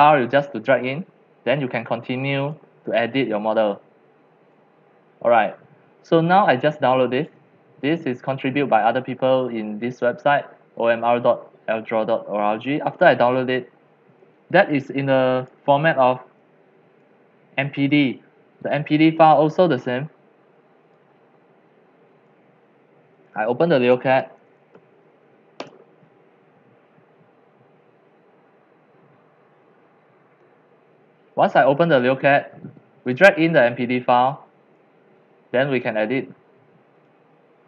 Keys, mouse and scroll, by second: 0.2 click, 1.7 scroll, 2.5-4.8 drag, 5.6 click, 6.6 click, 7.4-11.6 drag, 12.2 scroll down 2, 14.0 scroll, 14.3-18.8 drag, 19.4 click, 21.1 alt+F4, 22.3 click, 24.0-25.7 typing, 25.6 Return, 28.1 typing, 31.3 click, 32.2-37.6 drag.